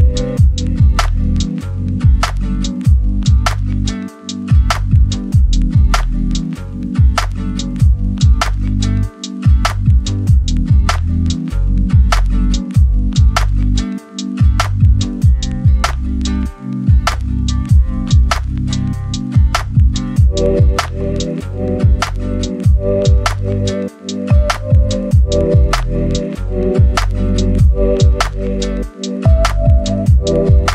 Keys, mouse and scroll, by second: 0.2 click, 1.0 right click, 1.3 scroll down 1, 1.5 right click, 2.0 scroll up 1, 2.2 right click, 2.4 scroll down 1, 2.6 scroll up 1, 2.7 right click, 2.9 scroll down 1, 3.1 scroll up 1, 3.1 right click, 3.8 click, 4.3 right click, 5.0 scroll up 1, 5.2 right click, 5.8 scroll down 1, 6.0-7.6 right drag, 7.6 scroll up 1, 9.1 click, 17.9 scroll down 1, 18.1 scroll up 1, 18.2 right click, 18.5 scroll down 1, 18.6 scroll up 1, 18.8 right click, 20.0 scroll up 1, 20.2 right click, 20.4 scroll down 1, 20.5 scroll up 1, 20.7 right click, 21.3 click, 21.5 scroll down 1, 21.7 scroll up 1, 23.4 click, 29.1-29.4 scroll up 1, 29.4 click.